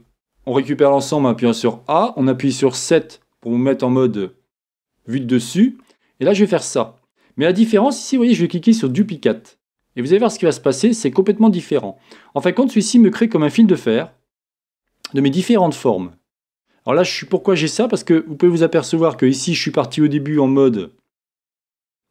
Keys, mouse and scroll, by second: 2.9 KP_7, 5.9-7.2 drag, 8.9 click, 11.1-16.5 drag, 18.5-22.1 middle drag, 20.4-21.9 scroll up 2, 21.9-22.1 scroll up 1.